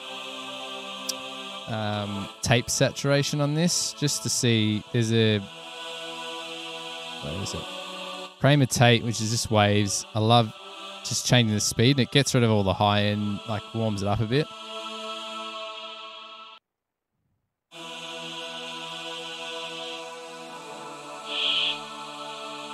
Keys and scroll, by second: 16.7 space, 16.9 space.